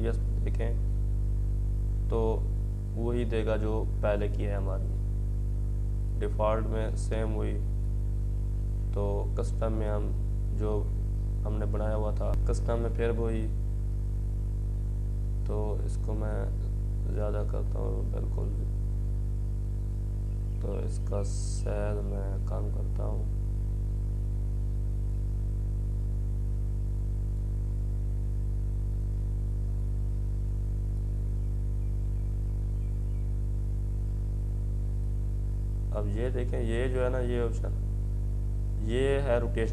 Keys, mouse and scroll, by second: 5.1-11.7 drag, 11.7 click, 12.6-14.2 drag, 14.2-18.1 drag, 19.5-19.8 scroll down 1, 20.9-21.8 scroll up 1, 22.2 click, 28.2-34.4 drag, 35.2-39.7 drag.